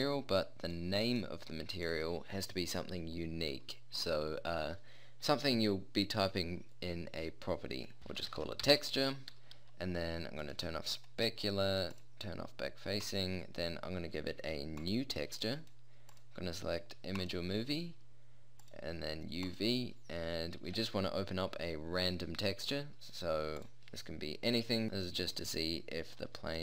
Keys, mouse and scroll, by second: 3.7-10.4 middle drag, 11.6-14.9 drag, 17.9-18.7 middle drag, 18.7-20.5 drag, 20.5-23.6 middle drag, 26.2 middle click.